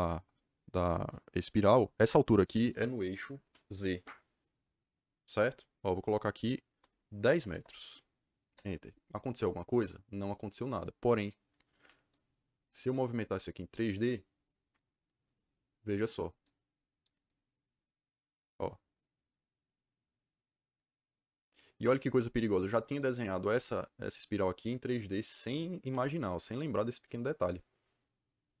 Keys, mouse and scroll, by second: 7.2 KP_1, 7.5 KP_0, 8.4 KP_Enter.